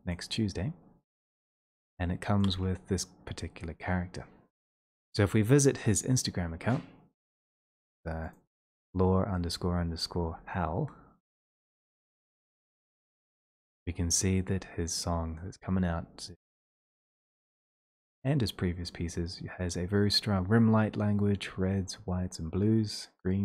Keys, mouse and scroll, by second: 0.1 click, 1.3-2.0 scroll, 2.4 click, 2.4 scroll, 7.5 click, 7.7 click, 8.4 ctrl+click, 16.5 middle click, 16.5 scroll up 2, 17.3-17.7 scroll up 5, 18.1-18.8 scroll, 18.8-21.3 scroll, 21.6 middle click, 21.6 scroll, 22.5-23.2 scroll, 23.2-23.4 scroll.